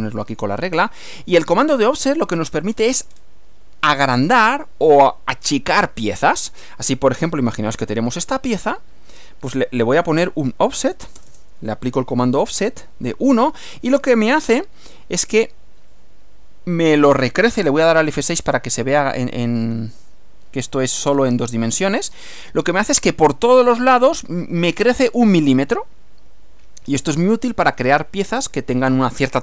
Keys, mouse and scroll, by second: 0.8-1.9 drag, 2.1-2.7 scroll up 2, 3.1 scroll up 2, 10.1 click, 11.2 BackSpace, 15.4 click, 18.1 F6.